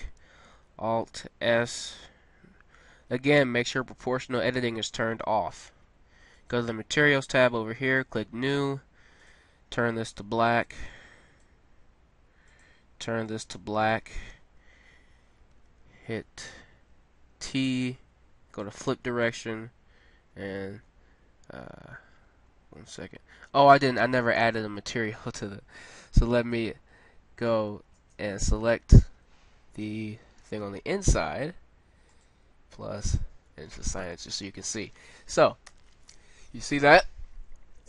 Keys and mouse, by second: 1.4 alt+s, 6.3-10.9 drag, 12.4-14.3 drag, 15.5 n, 15.8 t, 20.4 Tab, 22.3 Tab, 27.6 z, 28.3 z, 29.8 ctrl+l, 32.1-33.3 drag, 33.7 Tab, 35.7 a.